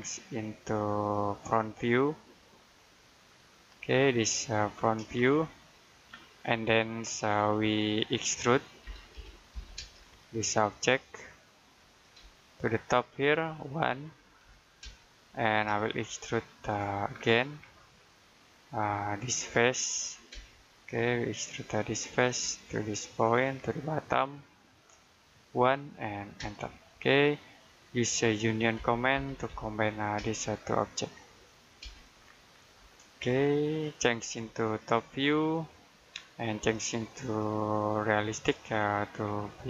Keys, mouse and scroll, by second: 1.1 click, 5.1 middle click, 6.7 middle click, 7.1 scroll up 1, 8.7 e, 9.6 space, 9.9-11.5 scroll up 1, 11.5 click, 12.0 space, 14.3 1, 14.7 space, 15.7 shift+middle click, 17.0-18.1 scroll down 1, 18.1 middle click, 19.1-20.2 scroll up 1, 20.2 space, 20.8-21.2 scroll up 1, 21.8 ctrl+click, 22.4 space, 23.5 middle click, 24.0-25.4 scroll down 1, 25.4 1, 26.2 space, 26.9-27.4 scroll down 1, 27.5 middle click, 28.6 typing, 30.0 space, 30.8 click, 31.7 space, 32.1 scroll down 1, 33.0 middle click, 34.5 click.